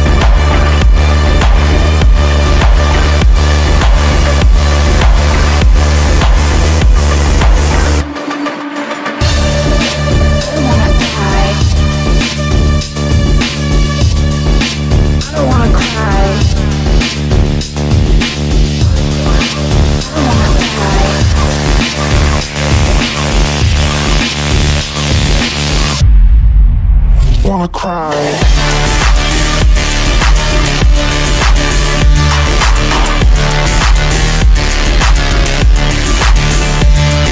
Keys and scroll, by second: 5.4 KP_Add, 5.8 w, 8.8 d, 10.8 f, 17.7 Delete.